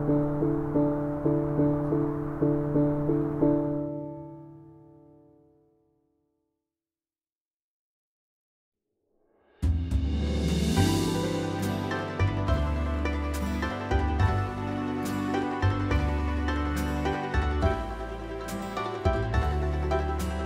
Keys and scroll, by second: 6.3 Escape, 6.6-7.3 typing, 9.1 space, 9.6 y, 11.5 space, 11.7 y, 14.5 space, 14.7 y, 17.3 space, 17.7 y, 17.9 space, 19.7 Escape, 19.9 b.